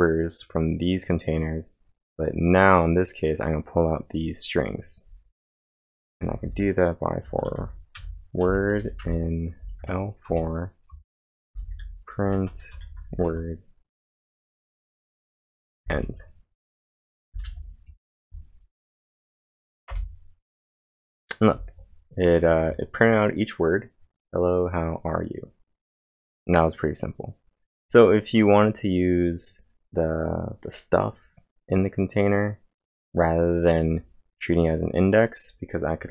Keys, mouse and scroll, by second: 5.6-12.7 typing, 10.9 Return, 13.3 Return, 15.0-18.2 typing, 15.3 Return, 18.2 ctrl+', 19.9 Return.